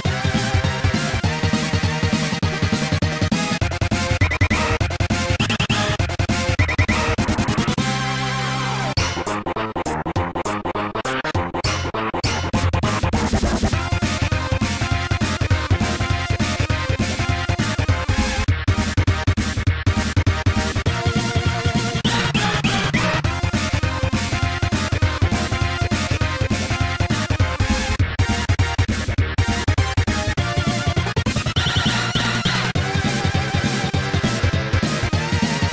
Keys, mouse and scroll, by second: 0.2 click, 0.3 Tab, 0.7 click, 4.6 Tab, 4.9 click, 5.2 ctrl+z, 5.9 g, 6.2 z, 7.3-7.8 scroll up 1, 7.8 scroll up 1, 8.7 click, 8.7 click, 8.8 Tab, 9.2 click, 9.3 click, 10.0 ctrl+s, 10.3 click, 10.5 a, 16.8 ctrl+s, 17.1 click, 24.4 ctrl+s, 24.6 click, 29.2 0, 30.8 4, 31.0 4, 32.1 scroll down 2, 33.2 middle click, 34.0-34.5 scroll up 2, 34.6 ctrl+s, 34.8 click, 35.2-35.6 scroll up 2.